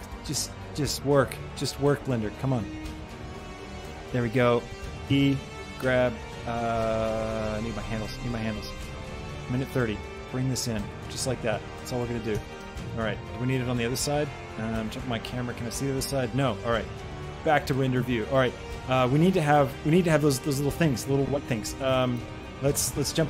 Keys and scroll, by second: 4.9 shift+Escape, 5.6 g, 12.2 Tab, 14.8 shift+KP_3.